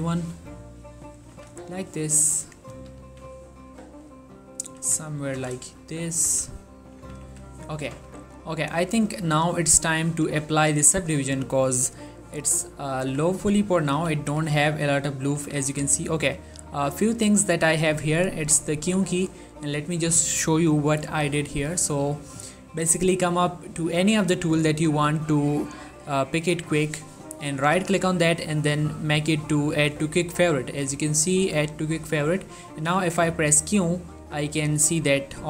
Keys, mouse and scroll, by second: 1.3 click, 1.4 z, 1.8 shift+middle click, 2.3 click, 2.8 g, 3.1 y, 4.7 click, 4.9-9.3 typing, 5.8 shift+middle click, 8.6 click, 10.2 click, 10.4 z, 13.1 Tab, 13.5 middle click, 14.1 q, 14.4 click, 14.7 middle click, 15.5 q, 16.3 click, 16.7 q, 18.6 q, 22.1 click, 27.8 right click, 30.1 click, 30.7 right click, 32.0 click, 32.9 q.